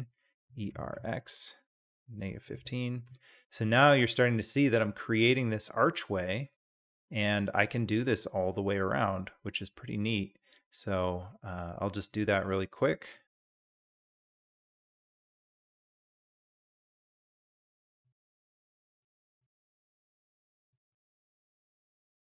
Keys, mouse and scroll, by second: 0.4 e, 3.8 middle click, 3.9-4.3 drag, 4.3-10.2 middle drag, 10.2-12.0 drag, 12.6-13.0 shift+drag, 13.7 e, 15.9 e, 20.4 e, 22.1 e.